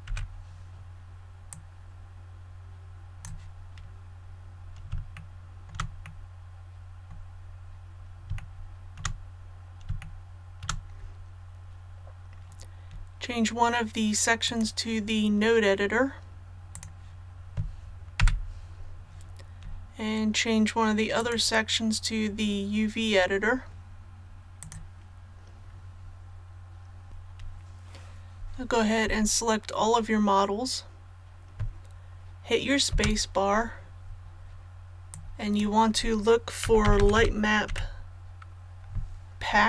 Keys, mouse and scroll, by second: 0.1 t, 1.5-3.3 drag, 4.1-4.9 scroll down 1, 5.1 shift+middle click, 6.0-7.3 middle drag, 7.4-8.3 scroll up 1, 8.4 shift+middle click, 9.4-9.9 scroll up 1, 10.0 shift+middle click, 14.4 click, 18.2 n, 21.2 click, 29.0 a, 33.8 space, 35.1 click, 36.6-37.7 typing.